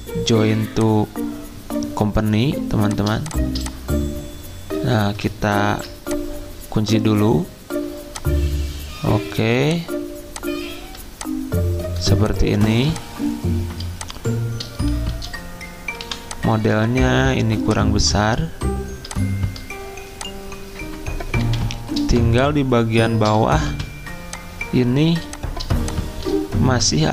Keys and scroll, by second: 5.6 ctrl+2, 12.7 z, 15.1 c, 16.0 v, 21.8 F10.